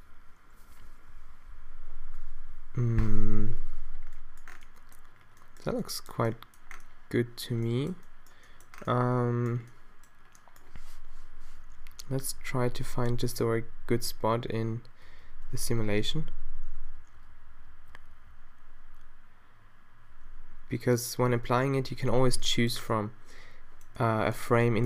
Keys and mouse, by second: 1.6 alt+a, 3.7 a, 11.7-14.6 Left, 15.1 Right, 15.3 Right, 15.5 Left, 15.7 Left, 15.9 Left, 16.1 Left, 16.3 Left, 16.4 Left, 16.6 Left, 16.8 Left, 17.0-20.1 Right, 20.2 Left, 20.3-21.3 Left, 21.4 Left, 21.6 Right, 21.6 Left, 21.8 Right, 22.0 Right.